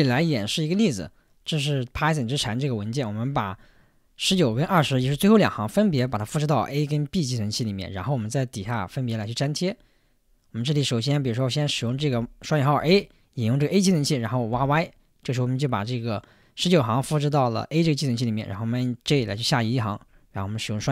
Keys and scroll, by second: 4.3 j, 5.0 k, 11.9 shift+', 12.9 a, 14.5 typing, 19.0 j, 20.6-20.9 typing.